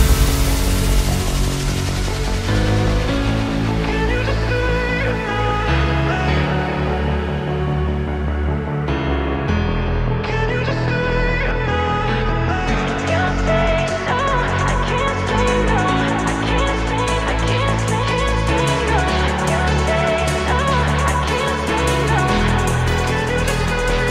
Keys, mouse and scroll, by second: 0.5 alt+z, 0.8 click, 1.5 middle click, 2.1 click, 2.6 alt+z, 4.8 click, 5.2-6.2 middle drag, 6.2 g, 7.9 middle click, 8.5 click, 8.9 g, 11.3 middle click, 11.8 click, 12.8 middle click, 13.5 click, 14.3 s, 17.4 middle click, 17.8 Tab, 18.1-20.2 middle drag, 20.2 KP_1, 20.5 scroll down 2, 20.6 scroll up 1, 20.9-21.2 shift+middle drag, 21.2-21.6 scroll down 2, 21.6 r, 23.4-23.9 scroll down 2, 23.9 g.